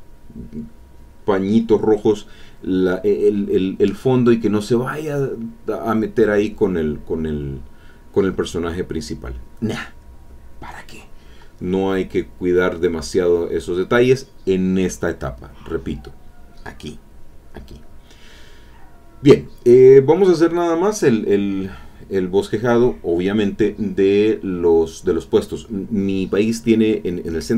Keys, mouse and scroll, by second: 2.5 click, 5.1-7.0 drag, 7.1 click, 7.4-8.7 drag, 11.5 click, 12.9-15.9 drag, 18.8 middle click, 19.8 middle click, 20.0 middle click, 20.9 click, 22.4-24.1 drag, 25.0 click, 26.5-27.5 drag.